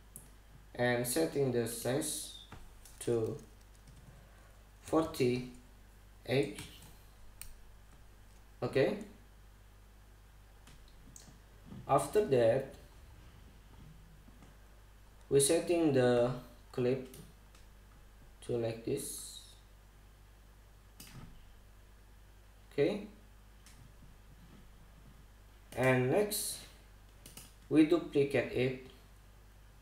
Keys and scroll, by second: 4.5 BackSpace, 5.5 4, 6.2 8, 7.2 Return.